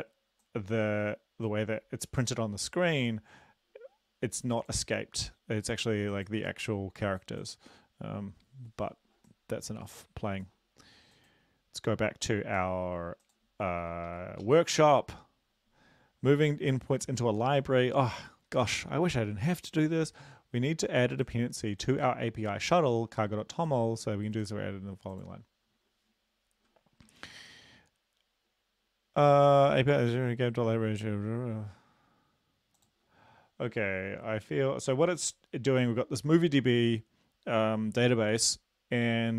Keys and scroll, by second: 14.2 super+Up, 14.7 super+Left.